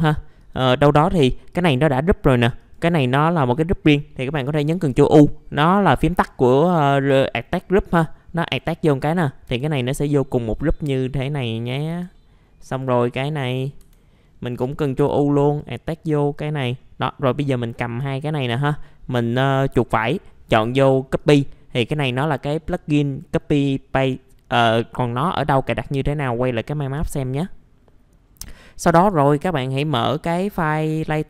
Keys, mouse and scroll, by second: 0.4 click, 0.8-1.5 scroll down 1, 1.5 click, 2.2 scroll up 1, 2.6 click, 3.1-4.4 scroll down 1, 4.7 ctrl+u, 7.8 click, 9.2 scroll down 1, 9.5 F4, 9.8 click, 11.9 ctrl+z, 12.1 middle click, 12.4 scroll up 1, 12.7 click, 13.8 F4, 14.2 middle click, 14.3 scroll down 1, 15.0 ctrl+u, 15.4 click, 16.6 scroll down 1, 17.0 click, 18.1 alt+middle click, 18.5 right click, 21.2-22.3 drag, 30.9 click.